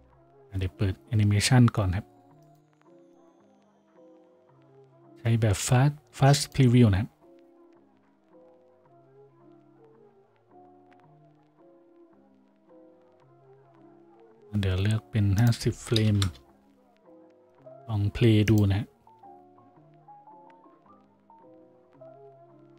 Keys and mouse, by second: 0.8 F6.